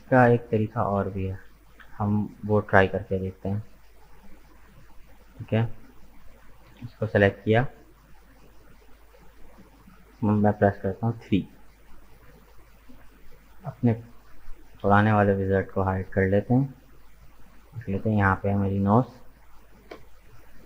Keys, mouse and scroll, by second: 0.2 ctrl+z, 0.5 ctrl+z, 0.9 ctrl+z, 1.1 ctrl+z, 1.5 ctrl+z, 1.8 ctrl+z, 2.5-4.4 middle drag, 4.4 click, 4.8-6.1 middle drag, 6.1 right click, 7.3-10.7 middle drag, 10.7 KP_3, 12.4-12.8 scroll down 2, 14.7-15.9 drag, 15.9 shift+middle click, 16.8-17.1 scroll up 2, 17.1-18.7 middle drag, 18.7 KP_3.